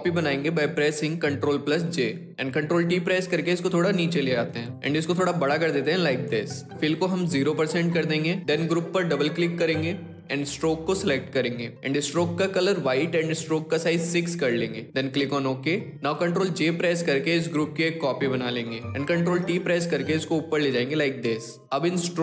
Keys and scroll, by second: 1.1 ctrl+j, 2.9 ctrl+t, 16.2 ctrl+j, 18.9 ctrl+t.